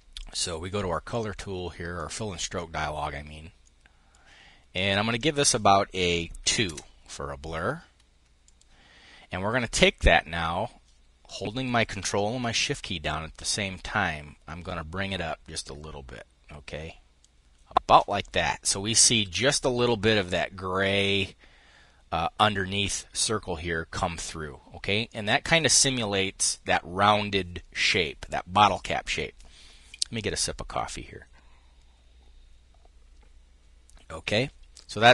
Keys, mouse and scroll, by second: 0.7-1.9 drag, 3.3 middle click, 3.5-4.7 drag, 4.8 click, 6.0 2, 6.3 Return, 8.1 click, 11.0 click, 24.6-25.8 drag.